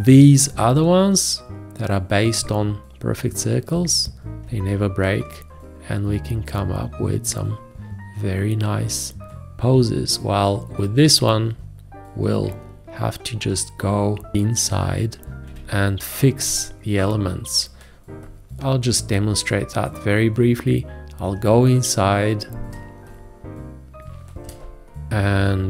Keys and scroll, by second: 15.5 v, 24.6 ctrl+space, 25.1 v.